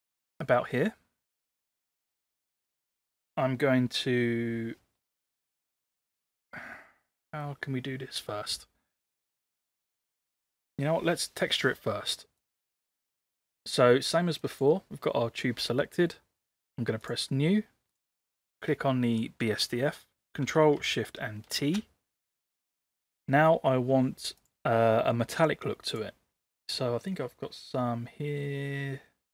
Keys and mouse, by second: 7.4-8.3 middle drag, 9.7-10.5 middle drag, 12.5 click, 14.6 click, 16.6 click, 17.9 click, 21.6 ctrl+shift+t.